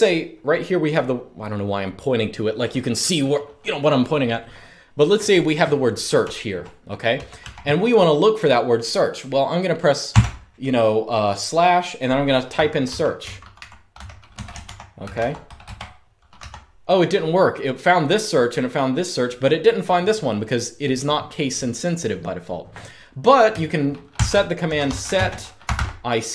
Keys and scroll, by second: 5.9-7.1 typing, 9.8 /, 12.0-16.1 typing, 17.2 typing, 23.8-26.3 typing.